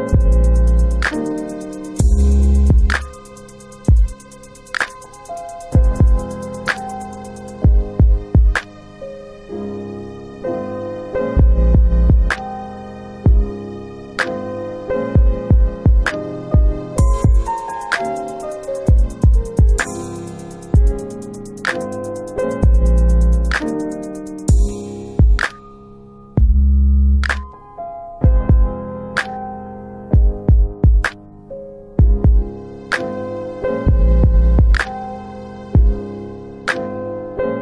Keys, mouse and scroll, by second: 4.1 click, 7.7 alt+right click, 8.1 alt+click, 8.3 alt+click, 8.6 alt+middle click, 8.9 alt+right click, 9.1 alt+right click, 9.5 alt+click, 9.6 alt+click, 10.0 alt+right click, 10.5 alt+click, 10.9 alt+click, 11.4 alt+right click, 11.8 alt+right click, 11.9 alt+middle click, 13.3 click, 15.3 alt+right click, 15.6 alt+right click, 15.8 alt+click, 16.0 alt+click, 16.5 alt+middle click, 16.7 alt+middle click, 17.5 alt+click, 18.2 alt+click, 18.5 alt+right click, 18.8 alt+right click, 18.9 alt+click, 19.4 alt+right click, 19.8 alt+right click, 19.9 alt+click, 20.1 alt+click, 20.5 alt+middle click, 20.6 alt+middle click, 21.0 alt+click, 21.3 alt+right click, 21.4 alt+right click, 22.6 alt+click, 22.7 alt+click, 23.4 alt+right click, 23.9 alt+right click, 24.4 alt+click, 24.5 alt+click, 25.0 alt+middle click, 25.4 alt+right click, 25.8 alt+click, 26.5 alt+click.